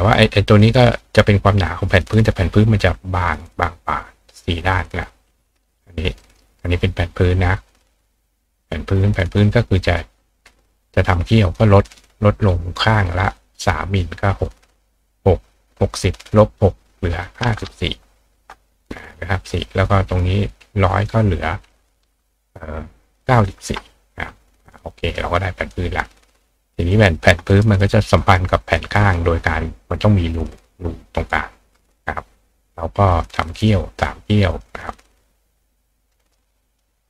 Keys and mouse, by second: 0.6-5.3 drag, 6.3 ctrl+click, 7.4 click, 11.3 click, 20.8 click, 25.6 click, 26.2 click, 26.9 right click, 27.5 right click, 28.2 click, 33.1 click, 33.6 click, 34.5 click, 34.9 click, 35.6 click, 36.1 right click, 36.7 click.